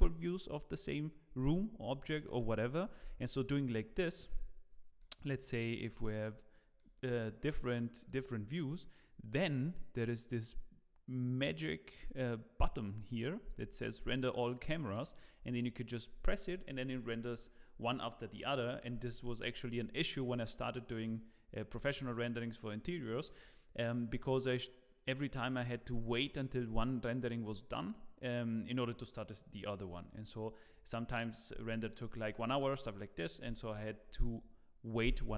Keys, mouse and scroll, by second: 5.0 middle click, 5.3 scroll down 1, 6.1 click, 6.5 middle click, 6.8-7.4 scroll down 4, 7.2 middle click, 8.0 click, 8.3 scroll down 2, 8.6 middle click.